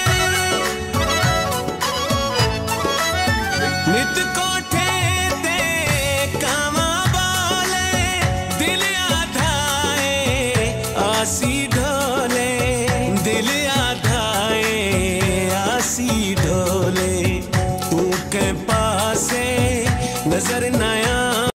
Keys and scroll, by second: 1.5 Left, 11.7 F4, 12.8 ctrl+s, 14.3 ctrl+s, 16.5 F4, 17.3 ctrl+s, 18.4 ctrl+e, 18.9 Return.